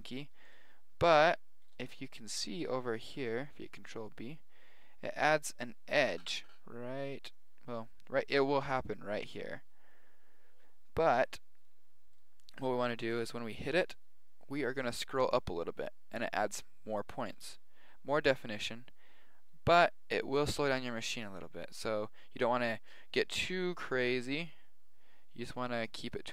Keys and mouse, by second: 0.4-3.9 middle drag, 3.7 ctrl+b, 13.0 ctrl+b.